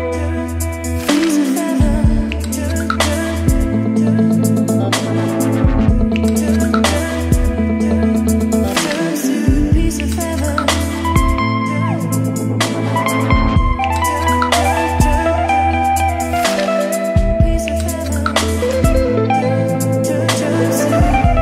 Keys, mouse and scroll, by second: 0.0 shift+9, 1.5 shift+Left, 2.1 shift+Left, 2.2 Return, 2.6 shift+~, 3.2 shift+<, 4.2-5.1 typing, 7.1-9.3 typing, 10.8-14.0 typing, 12.9 Return, 15.5-20.5 typing, 17.5 Return, 21.3-21.4 drag.